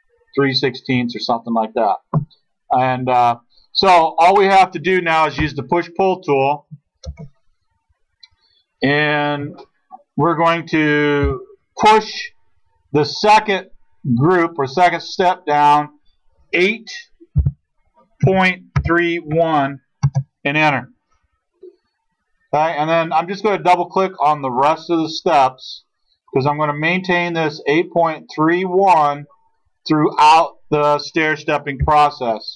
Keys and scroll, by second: 7.1 alt+Tab, 9.2-10.0 typing, 11.2 p, 17.4-19.7 typing, 20.0 Return, 31.8 ctrl+z.